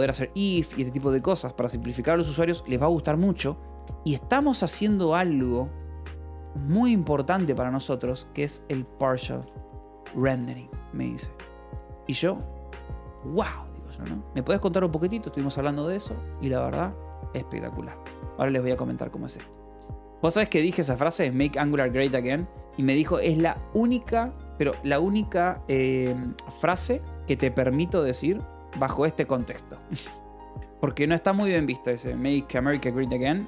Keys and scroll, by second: 0.0-0.8 typing, 0.3 Escape, 7.7-10.4 typing.